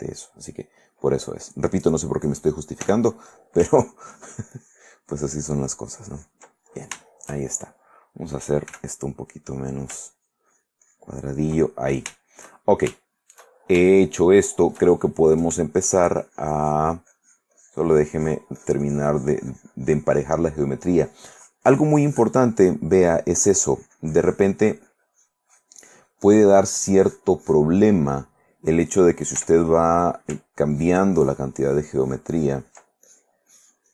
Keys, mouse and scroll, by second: 0.9 click, 3.0 f, 3.8 ctrl+click, 4.3 ctrl+click, 4.7 ctrl+click, 5.3-6.7 ctrl+drag, 6.8 ctrl+shift+middle click, 7.3-8.1 ctrl+shift+middle drag, 8.9 f, 9.4 click, 9.7 middle click, 10.3-11.8 ctrl+drag, 11.9 ctrl+middle click, 12.8-15.5 ctrl+shift+middle drag, 15.6 shift+middle click, 16.4-18.7 drag, 18.8-20.7 drag, 20.8 middle click, 21.5 click, 22.8 middle click, 23.3-26.4 drag, 27.3 click, 28.0 middle click, 28.7 middle click, 29.6 f, 30.1 click, 30.8-32.9 ctrl+drag, 33.2 ctrl+click.